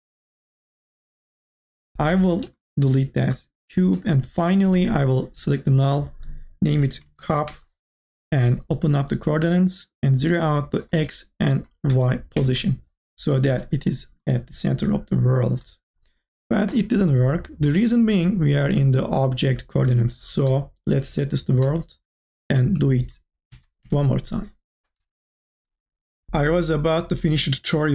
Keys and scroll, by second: 3.8 Delete, 6.5-7.8 typing, 11.4 KP_0, 12.3 Return, 23.3 KP_0, 23.8 Return.